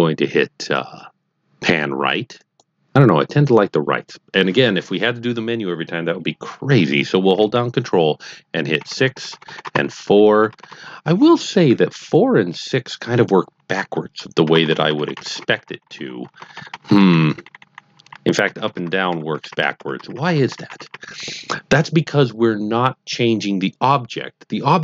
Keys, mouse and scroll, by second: 2.3 click, 8.8 ctrl+KP_6, 8.9 ctrl+KP_6, 9.1 ctrl+KP_6, 9.3 ctrl+KP_6, 9.4 ctrl+KP_6, 9.6 ctrl+KP_4, 9.8 ctrl+KP_4, 9.9 ctrl+KP_4, 10.1 ctrl+KP_4, 10.3 ctrl+KP_4, 10.5 ctrl+KP_4, 10.6 ctrl+KP_4, 14.4 ctrl+KP_4, 14.6 ctrl+KP_4, 14.7 ctrl+KP_4, 14.9 ctrl+KP_4, 15.1 ctrl+KP_6, 15.3 ctrl+KP_6, 15.4 ctrl+KP_6, 15.6 ctrl+KP_6, 15.7 ctrl+KP_6, 15.9 ctrl+KP_6, 16.2 ctrl+KP_2, 16.3 ctrl+KP_2, 16.7 ctrl+KP_2, 16.8 ctrl+KP_2, 17.1 ctrl+KP_8, 17.2 ctrl+KP_8, 17.4 ctrl+KP_8, 17.5 ctrl+KP_8, 17.7 ctrl+KP_8, 17.9 ctrl+KP_8, 18.1 ctrl+KP_8, 18.4 ctrl+KP_2, 18.6 ctrl+KP_2, 18.8 ctrl+KP_2, 18.9 ctrl+KP_2, 19.1 ctrl+KP_2, 19.4 ctrl+KP_4, 19.5 ctrl+KP_4, 19.7 ctrl+KP_4, 20.0 ctrl+KP_4, 20.1 ctrl+KP_4, 20.3 ctrl+KP_4, 20.5 ctrl+KP_8, 20.7 ctrl+KP_8.